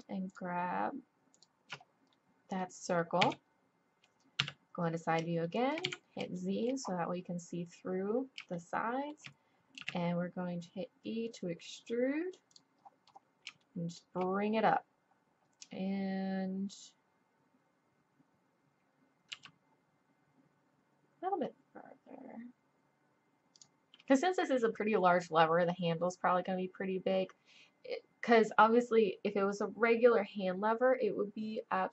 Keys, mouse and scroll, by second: 3.2 z, 4.4 KP_3, 4.6 click, 5.8 click, 5.8 z, 8.5 middle click, 9.8 e, 13.0 click, 13.2-15.8 drag, 19.3 g.